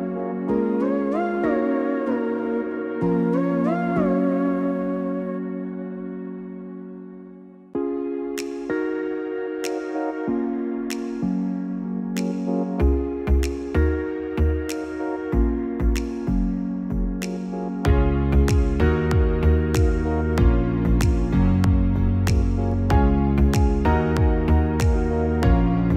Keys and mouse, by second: 8.7 alt+shift+click, 10.3 alt+shift+click, 14.6-18.3 drag, 19.9-24.9 drag, 21.6 BackSpace.